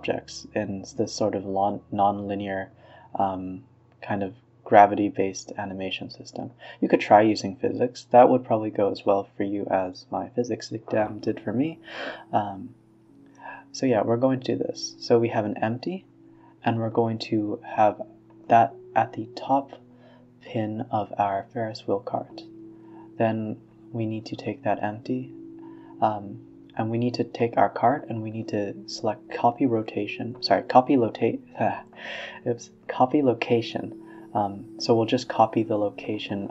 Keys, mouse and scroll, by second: 1.0-2.4 middle drag, 2.4 click, 2.7-4.4 middle drag, 5.7 click, 6.0-7.8 drag, 8.9-10.4 drag, 10.4 Tab, 10.7 a, 10.9 g, 12.1 KP_3, 12.6 g, 13.4 Tab, 13.6-14.2 scroll down 7, 14.2 click, 14.5 click, 14.8 r, 16.7 click, 17.2 g, 19.2 click, 19.6 g, 20.9-21.5 middle drag, 21.5 g, 22.1 shift+click, 22.7 ctrl+p, 24.8 click, 25.2 click, 25.4 click, 25.6 r, 28.6 KP_1, 29.2 KP_3, 29.5 r, 32.0 scroll up 2, 32.2-32.6 middle drag, 32.6 scroll down 3, 32.9-34.6 middle drag, 34.6 click, 35.0 shift+click, 35.7 KP_1, 35.9 KP_3, 36.4-36.5 scroll up 2.